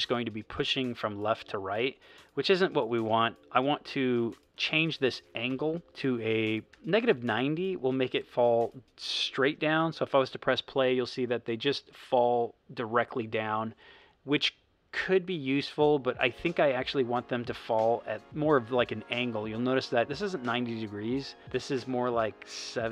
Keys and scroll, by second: 6.2-7.2 typing, 8.5 0, 9.4 space, 16.8 space.